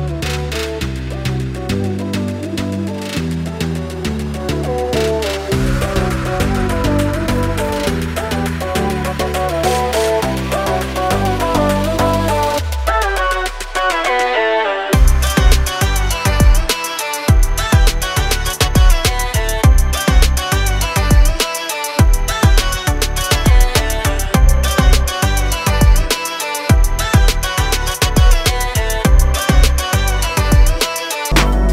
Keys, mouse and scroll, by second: 1.2 click, 16.4 click, 18.7 a, 19.0 click, 20.4 i, 20.7 click, 21.9 a, 22.2 click, 25.7 click, 28.5 i.